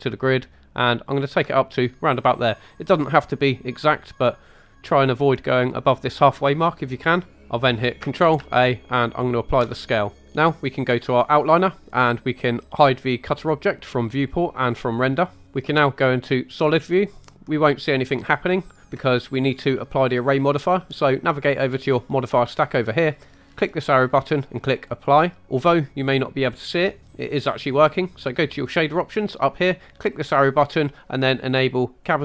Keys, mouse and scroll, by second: 1.1 ctrl+click, 8.4 ctrl+a, 13.3 click, 14.3 click, 14.9 click, 15.4 scroll down 2, 16.6-17.4 drag, 17.4-18.2 middle drag, 23.5-24.9 drag, 25.4 middle click, 30.0-32.2 drag.